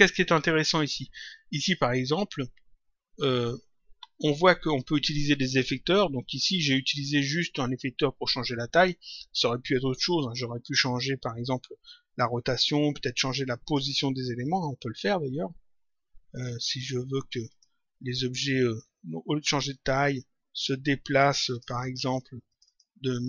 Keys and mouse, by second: 3.9 click, 16.3 click, 19.3 click, 20.5 click.